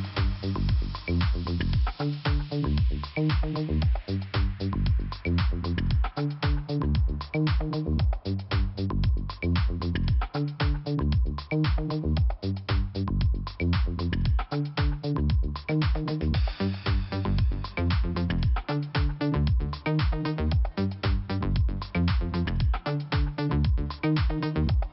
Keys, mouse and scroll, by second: 0.3 click, 0.4 click, 0.6 click, 0.7 double click, 1.7 double click, 1.9 double click, 2.0 click, 3.5 click, 4.7 scroll down 1, 6.0 click, 8.3 click, 9.4 click, 9.9 click, 10.5 scroll up 1, 11.1 click, 11.7 click, 13.3 click, 14.5 click, 16.2 click, 18.7 click, 18.7 click, 19.3 click, 21.8 click, 22.6 click, 23.5-23.8 scroll up 1, 24.0 click, 24.1 click, 24.6 click.